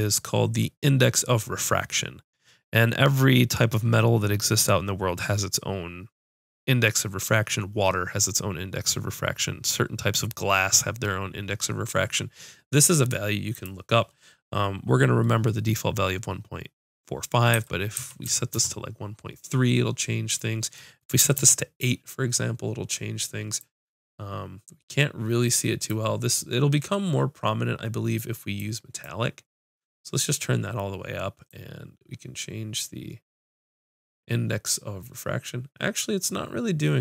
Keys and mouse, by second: 20.3-26.0 drag, 26.3-28.6 middle drag, 28.6-30.3 drag, 30.3-32.0 middle drag, 32.0-33.2 drag, 33.2 middle click.